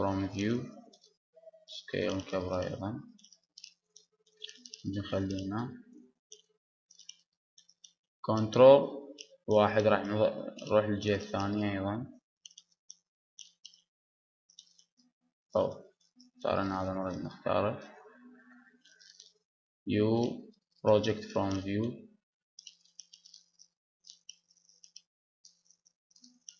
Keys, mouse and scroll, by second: 0.0 shift+space, 1.5 s, 3.7-5.1 middle drag, 3.7 g, 6.7 Tab, 6.7-9.5 drag, 9.5 ctrl+KP_1, 10.8 Tab, 11.5-13.6 drag, 13.0 b, 13.6-16.6 middle drag, 16.6-18.9 drag, 18.9 ctrl+KP_1, 20.8 u, 22.0 s, 24.0 click, 24.0 g, 24.8-26.1 middle drag, 26.1 Tab, 26.1-26.5 drag.